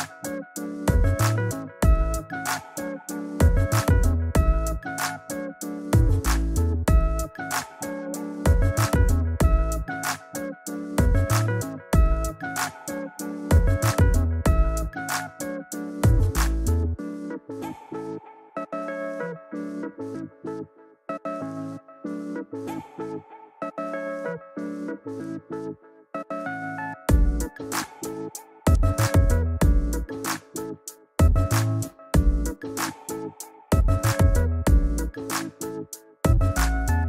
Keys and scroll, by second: 4.3 super+t, 5.0 alt+super+t, 23.3 shift+Return, 23.8 Return.